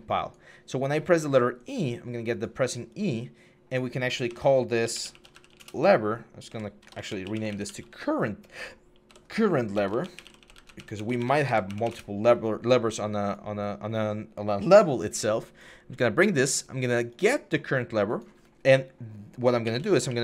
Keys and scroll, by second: 4.0 F2, 4.6-5.4 typing, 6.2 F2, 6.5-8.1 typing, 8.8 F2, 9.4-11.6 typing, 11.7 Return, 19.2-20.2 typing.